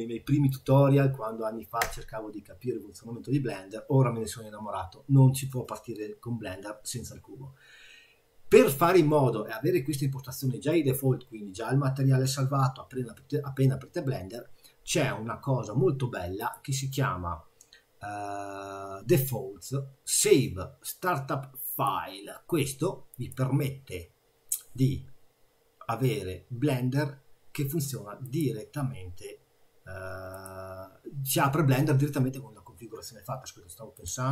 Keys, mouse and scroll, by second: 16.4 click.